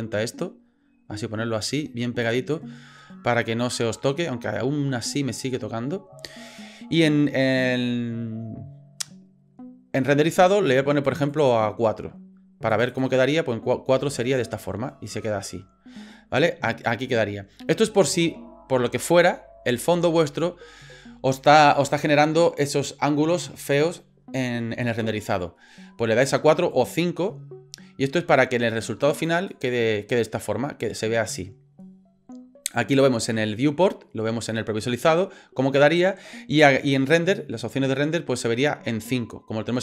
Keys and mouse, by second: 0.0 click, 0.2 click, 0.6 click, 0.9-2.0 drag, 2.0 click, 11.0 click, 12.7 click, 12.9 click, 14.4 middle click, 26.7 click, 29.2 click, 29.3 click.